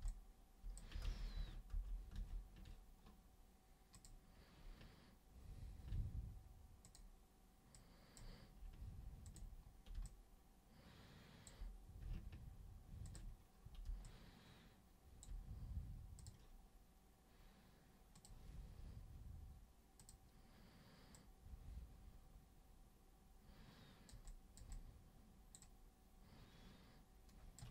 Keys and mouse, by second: 0.1 alt+click, 1.0 ctrl+super+z, 1.3 ctrl+super+z, 1.7 ctrl+super+z, 2.1 ctrl+super+z, 3.9 super+click, 6.8 super+click, 7.7 super+click, 9.2 ctrl+super+click, 10.0-11.4 alt+super+drag, 13.0 ctrl+super+click, 14.0-15.2 alt+super+drag, 16.2 super+click, 18.2 super+click, 20.0 super+click, 21.1-24.1 super+drag, 24.2 super+click, 24.7 super+click, 25.6-27.5 super+drag.